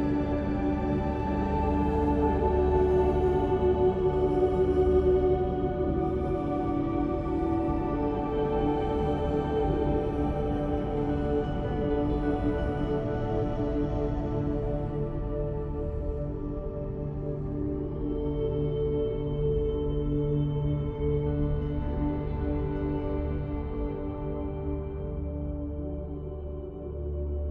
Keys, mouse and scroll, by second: 0.2 Tab, 3.5 Tab, 4.2 ctrl+r, 6.1 ctrl+r, 8.1-9.4 drag, 9.7 e, 10.6 ctrl+r, 11.5 ctrl+r, 12.7 click, 13.4 ctrl+r, 14.4 ctrl+r, 15.2 middle click, 16.5 ctrl+r, 17.6 click, 18.2 click, 18.4 e, 19.2 ctrl+r, 20.0 ctrl+r, 21.4 middle click, 21.7 Tab, 23.3 middle click, 24.4 click, 25.1 middle click.